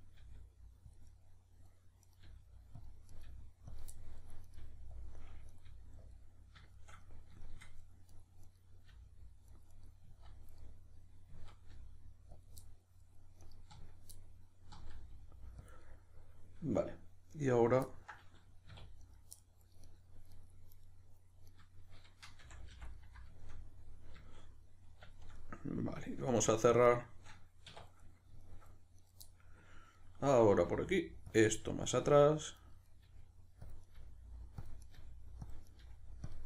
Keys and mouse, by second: 0.2 g, 0.9 click, 1.1 middle click, 2.0 right click, 2.3 g, 2.9 click, 3.1 right click, 3.3 g, 3.8 click, 3.9-4.5 middle drag, 4.5 right click, 4.6 g, 5.0 click, 5.5 right click, 5.7 g, 6.1 click, 6.7-8.1 shift+middle drag, 8.1 right click, 8.5 right click, 8.9 g, 9.7 right click, 10.1 z, 10.6-12.5 middle drag, 11.3 z, 12.5 click, 12.6 middle click, 13.4 right click, 13.7 z, 14.1-15.7 middle drag, 14.7 z, 15.7 click, 15.8-19.1 middle drag, 18.7 2, 19.1 right click, 19.4-19.9 middle drag, 19.9 right click, 20.3 right click, 20.9-21.5 middle drag, 21.5 right click, 22.4 f, 22.9-29.0 middle drag, 27.6 1, 29.0 right click, 29.2-31.4 middle drag, 30.5 g, 31.4 click, 31.4 middle click, 31.9 right click, 32.0 g, 32.8 right click, 33.0 g, 33.7 click, 33.9 right click, 33.9 g, 34.7 click, 34.8 right click, 34.9 g, 35.5 click, 35.7 right click, 35.8 g, 36.3 click.